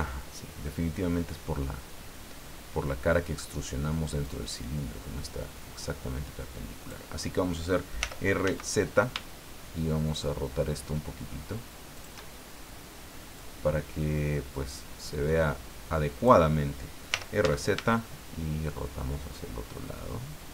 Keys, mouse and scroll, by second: 4.2-7.1 drag, 8.0 r, 8.4 z, 11.9 shift+click, 13.4-16.4 drag, 17.1 r, 17.4 z.